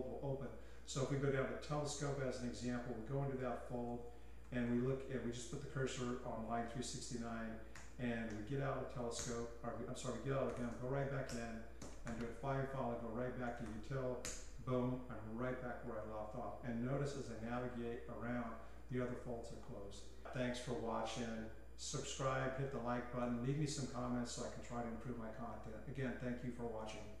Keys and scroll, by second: 0.9-9.0 typing, 9.2 Return, 10.2-12.2 typing, 13.2-14.2 typing, 17.0-19.6 typing.